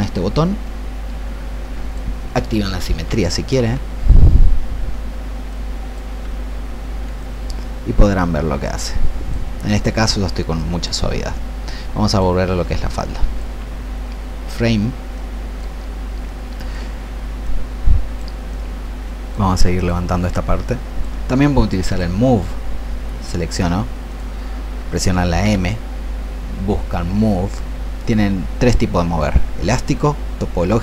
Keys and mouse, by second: 0.6-2.6 drag, 3.0 ctrl+z, 3.5 ctrl+x, 5.7-21.7 drag, 25.4 m.